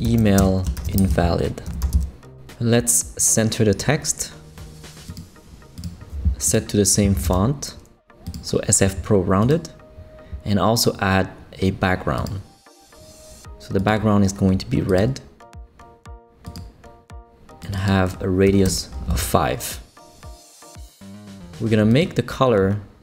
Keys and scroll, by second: 0.0-2.4 typing, 6.9-7.7 typing, 16.2 typing, 18.3 typing, 18.6 Return.